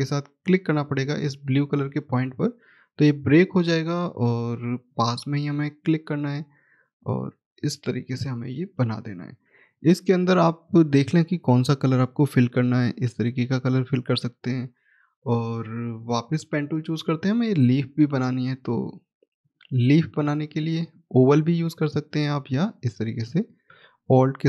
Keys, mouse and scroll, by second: 1.7 alt+click, 5.7-7.1 scroll down 1, 7.1 click, 12.0 click, 13.7 right click, 16.7 click, 17.4 middle click, 19.3 click, 24.3 alt+click.